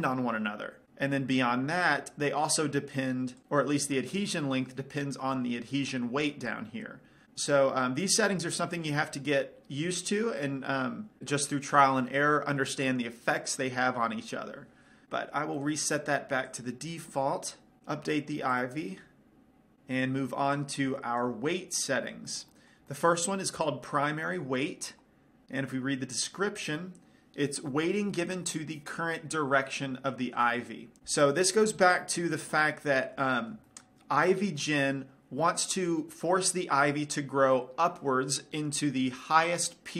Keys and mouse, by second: 2.2-3.4 drag, 7.8-9.8 drag, 16.0-19.6 right drag, 19.6 click, 21.0-22.9 drag, 22.9-25.1 middle drag, 26.5-32.4 middle drag, 37.2-39.9 middle drag.